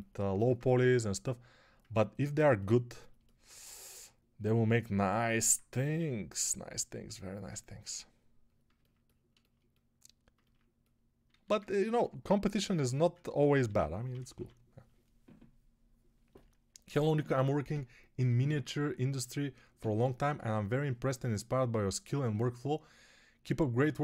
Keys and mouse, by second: 3.8 3, 7.7 1, 8.7 ctrl+1, 11.1 alt+q, 13.5 g, 14.0 ], 14.1 ], 14.2 ].